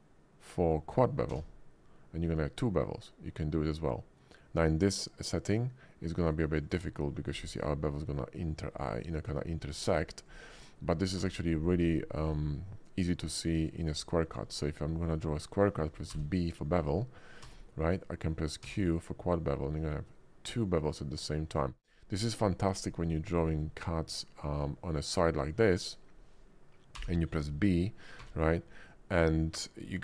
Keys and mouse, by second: 1.3 q, 6.6 click, 7.7 middle click, 7.7 click, 9.3 ctrl+z, 9.9 ctrl+z, 11.2 d, 12.9-14.4 drag, 16.1 b, 17.4 q, 18.6 q, 21.5 click, 21.8 click, 22.4 drag, 23.1 middle click, 23.6-24.6 drag, 26.9 b, 28.2 q.